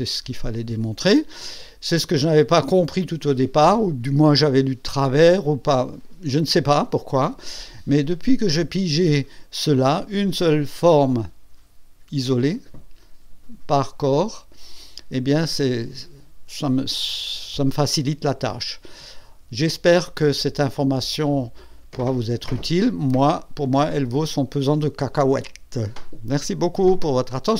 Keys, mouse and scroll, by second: 0.1 click.